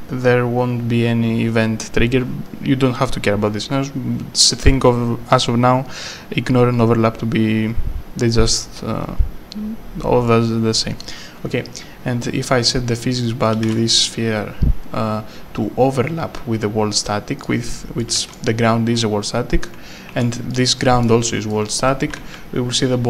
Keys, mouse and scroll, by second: 13.7 w, 17.4 click, 18.3 w, 20.5-22.8 typing, 20.8 right click.